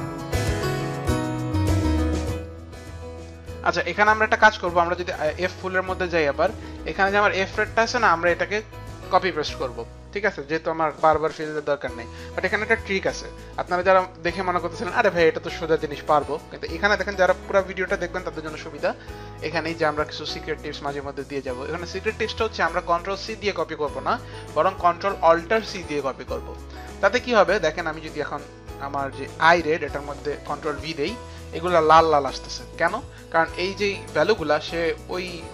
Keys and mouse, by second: 0.0-5.4 typing, 0.0 click, 0.5 click, 0.6 click, 0.8 click, 1.2 click, 1.3 ctrl+d, 1.4 click, 2.1 click, 4.9 click, 8.5 click, 25.6 ctrl+alt+c, 26.5 ctrl+alt+c, 27.2 ctrl+alt+c, 27.8 click, 29.8 click, 30.3 click, 30.9 ctrl+v, 30.9 click.